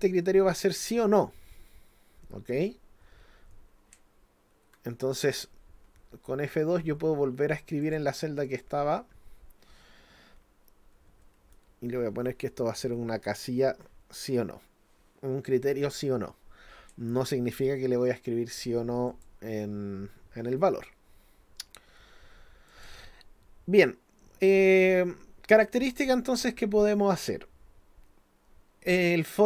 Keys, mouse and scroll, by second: 7.8 click, 8.5 click, 19.1 click, 22.7 click.